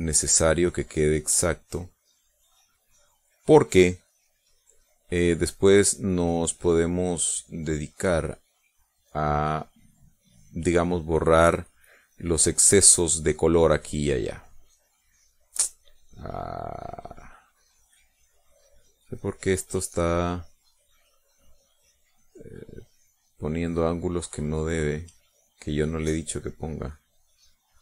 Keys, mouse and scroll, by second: 0.1 click, 0.5 click, 1.0 click, 1.4 click, 2.2 click, 2.8 click, 3.4 click, 3.9 click, 4.3 click, 4.7 click, 6.8 click, 8.1 click, 9.3 click, 11.4 click, 12.8 click, 13.6 click, 14.1 click, 15.7 click, 17.5 click, 18.6 click, 19.1 click, 19.6 click, 20.1 click, 20.6 click, 21.2 click, 21.8 click, 26.1 click, 27.0 click, 27.6 click.